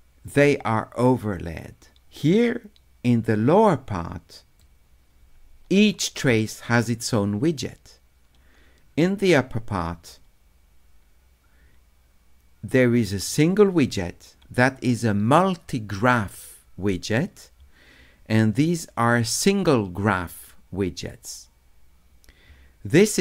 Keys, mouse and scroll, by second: 4.6-6.3 drag.